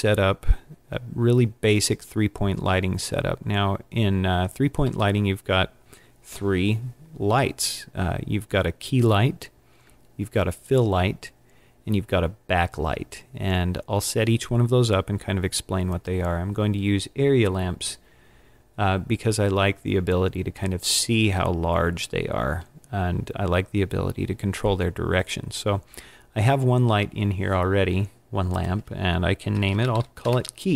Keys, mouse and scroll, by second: 28.5 click.